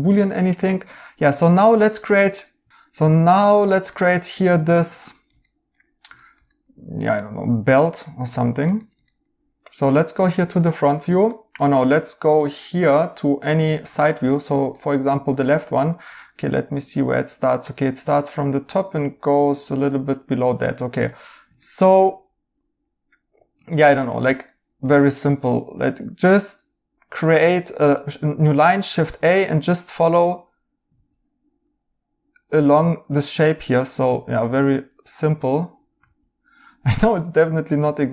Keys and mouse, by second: 3.9 right click, 7.7 right click, 10.3 right click, 13.9 right click, 21.6 right click, 23.8 a, 24.4 right click, 27.8 Escape, 30.9 ctrl+z, 36.0 ctrl+z, 36.8 right click.